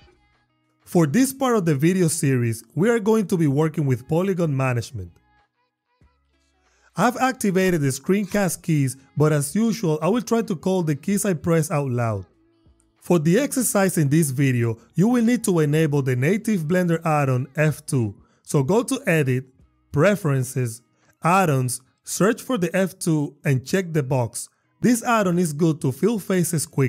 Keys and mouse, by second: 5.0 click, 7.8 s, 8.3 d, 11.3 click, 20.0-21.2 drag.